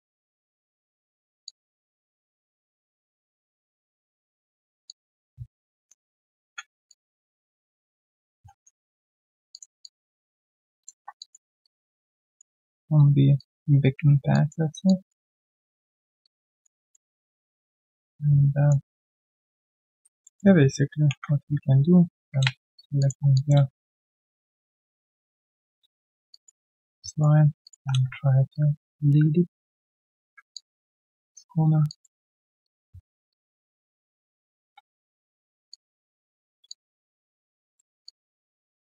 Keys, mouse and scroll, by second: 1.4 alt+click, 4.8 alt+click, 5.8 ctrl+shift+click, 6.8 alt+click, 7.3 right click, 8.2 right click, 8.4 scroll, 8.9 right click, 9.3 q, 9.8 alt+click, 10.8 alt+click, 11.2 alt+click, 11.4 alt+right click, 11.6 alt+click, 11.9 alt+middle click, 12.2 alt+click, 12.5 alt+middle click, 12.8 alt+right click, 13.3 alt+click, 14.3 alt+click, 15.8 alt+middle click, 16.2 alt+click, 16.8 alt+middle click, 17.1 alt+right click, 17.3 alt+click, 19.1 alt+click, 20.2 alt+middle click, 21.1 ctrl+shift+x, 23.0 shift+click, 23.3 alt+click, 25.6 Return, 26.3 alt+click, 26.6 alt+middle click, 26.7 typing, 26.9 right click, 28.0 typing, 28.5 ctrl+shift+click, 30.5 alt+click, 31.8 alt+click, 33.3 ctrl+shift+click, 35.7 ctrl+shift+click, 36.7 alt+click, 38.6 ctrl+shift+click.